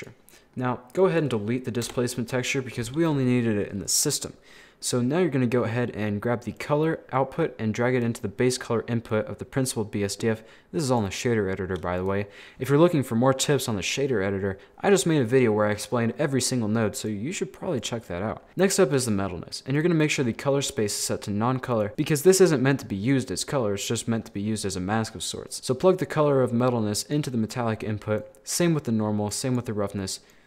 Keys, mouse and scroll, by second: 0.0 click, 0.3 middle click, 1.0 click, 1.9 Delete, 3.4-3.7 scroll up 3, 3.7 middle click, 4.1-4.8 scroll up 3, 4.8-6.6 middle drag, 6.6 click, 8.2 middle click, 8.7-9.2 scroll up 1, 9.2-12.1 drag, 13.2 scroll down 4, 13.3-16.0 middle drag, 16.1 scroll down 1, 16.2 middle click, 17.1-18.1 drag, 18.1 middle click, 18.5 scroll up 2, 19.8 click, 20.0-21.0 drag, 21.7-24.0 drag, 24.0-25.6 middle drag, 25.6-27.6 drag, 27.6 middle click, 28.2 click, 29.3-30.4 drag.